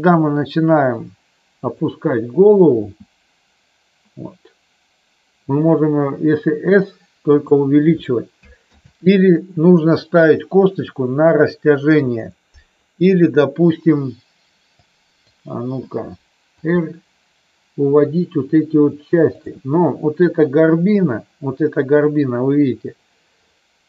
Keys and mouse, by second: 1.5 click, 2.8 s, 7.3 click, 8.7 ctrl+z, 14.8 click, 16.5 r, 19.3 click.